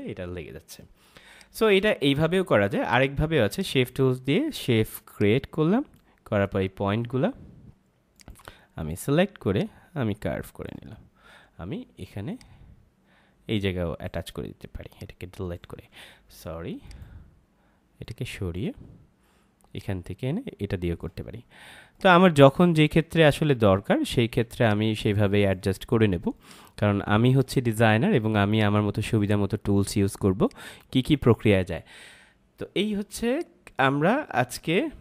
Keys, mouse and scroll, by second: 1.2 space, 1.3 click, 1.7 space, 3.4 click, 16.0 z, 16.8 click, 21.9 shift+click.